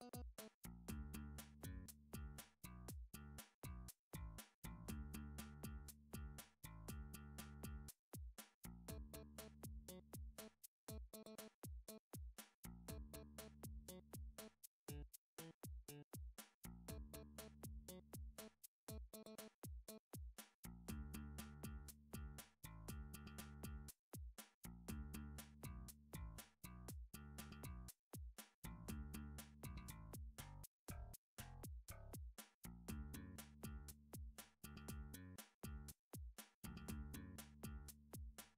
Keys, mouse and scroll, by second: 0.3 s, 0.5 x, 1.7 click, 1.9 s, 3.1 middle click, 3.5 s, 4.4 click, 5.0 alt+click, 5.6 s, 7.4 click, 9.7 middle click, 10.3 middle click, 11.3 e, 13.0 click, 14.4 middle click, 15.4 e, 16.7 click, 18.3 middle click, 18.7 s, 19.0 x, 20.5 click, 20.7 s, 21.9 middle click, 22.8 middle click, 22.8 g, 23.6 click, 25.8 middle click, 26.6 middle click, 27.1 e, 27.9 click, 28.6 s, 28.8 x, 29.4 click, 30.0 s, 31.1 middle click, 32.2 e, 33.3 click, 34.0 middle click, 34.2 scroll down 4, 34.5 Tab, 35.1 scroll up 4, 35.3 middle click, 36.6 scroll down 2, 36.9 scroll up 1, 37.3 click, 38.1 scroll.